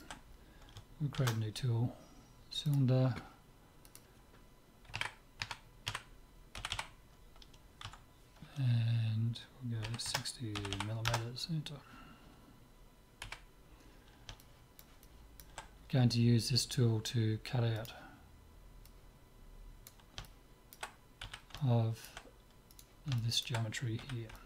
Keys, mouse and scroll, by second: 1.1 shift+a, 3.9-5.6 drag, 6.7 m, 10.7 m, 13.2 KP_7, 14.4-17.0 middle drag, 17.8-20.8 drag, 20.2 middle click, 21.2 z, 22.7-24.4 drag, 24.0 z.